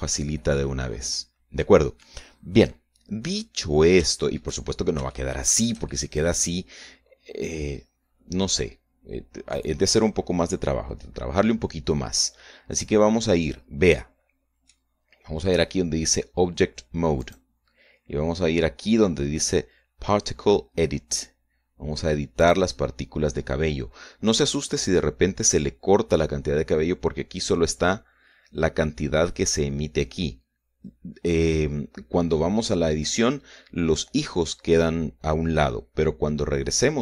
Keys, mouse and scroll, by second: 3.7-4.1 scroll down 2, 4.2 middle click, 4.9 shift+middle click, 5.9-9.4 shift+middle drag, 9.4 scroll down 1, 14.8 middle click, 18.1 click, 23.3 click, 29.0-29.5 scroll up 1, 31.3 scroll down 1.